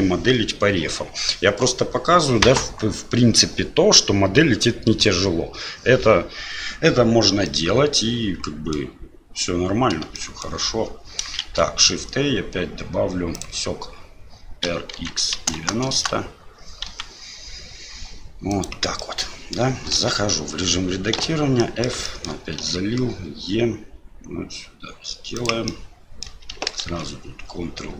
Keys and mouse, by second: 10.1-10.5 shift+middle drag, 11.4 shift+a, 16.9 s, 19.1 middle click, 20.0 Tab, 21.2 f, 21.6 click, 21.6 middle click, 22.1 shift+middle click, 22.6 e, 25.8 click, 26.8 ctrl+b.